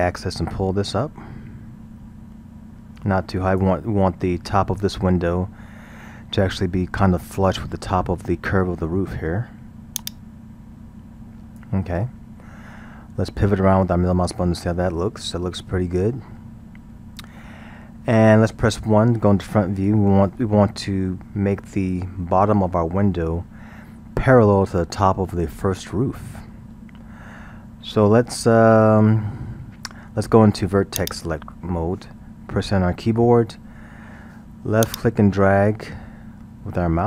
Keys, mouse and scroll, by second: 10.0-13.0 drag, 13.2-16.3 middle drag, 19.4 KP_1, 21.6-22.4 scroll, 31.0 click, 33.0 a, 34.9 click.